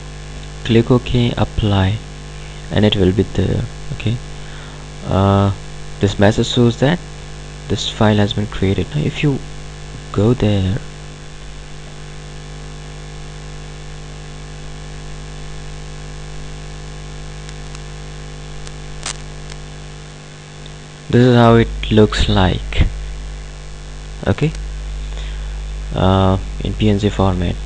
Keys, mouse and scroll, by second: 9.3 click, 17.8 click.